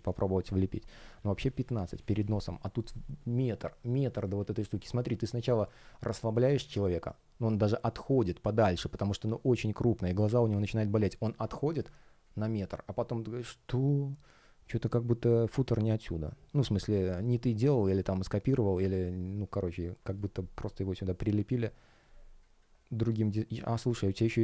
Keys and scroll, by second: 4.5 space, 20.0 space, 23.6 space.